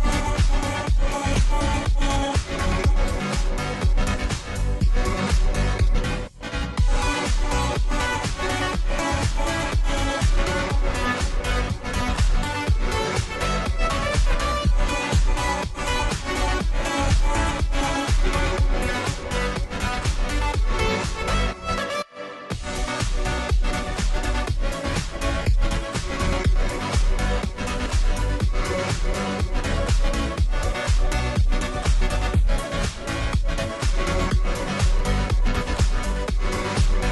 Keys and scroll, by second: 21.0 ctrl+t, 31.3 Return.